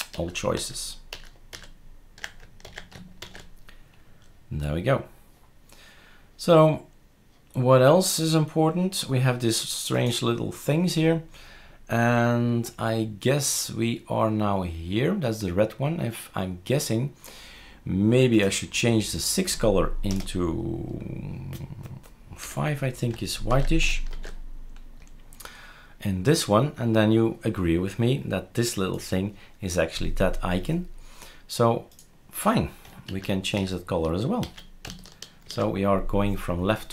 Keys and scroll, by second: 0.1 ctrl+z, 0.6 ctrl+z, 1.1 ctrl+z, 1.5 ctrl+z, 2.6 ctrl+s, 20.1 BackSpace, 22.4 5, 23.5-24.1 ctrl+s, 24.1 shift+super+r, 33.1 ctrl+z, 33.5 ctrl+z, 34.4 ctrl+s, 35.5 shift+super+r.